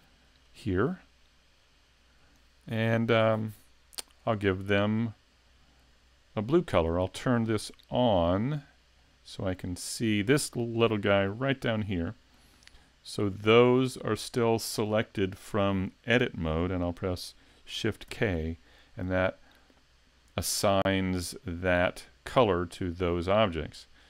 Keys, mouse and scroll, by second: 0.5 click, 5.0 middle click, 7.6 click, 9.0 middle click, 9.6-10.1 scroll up 1, 12.1 shift+middle click, 12.6 middle click, 15.3 middle click, 18.1 shift+k, 19.5 middle click.